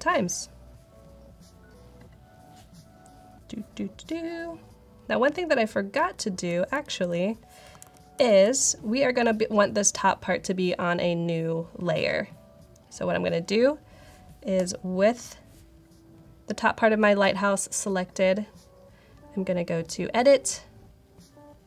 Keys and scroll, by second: 5.8 super+z, 6.7 super+z, 7.7 super+-, 8.1 super+-.